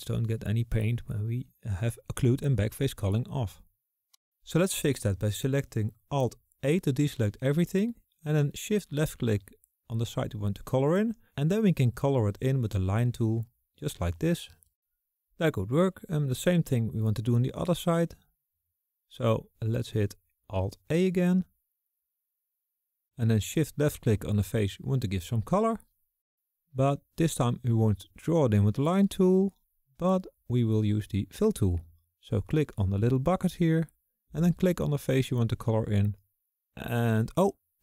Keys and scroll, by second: 5.6 alt+a, 22.4 alt+a.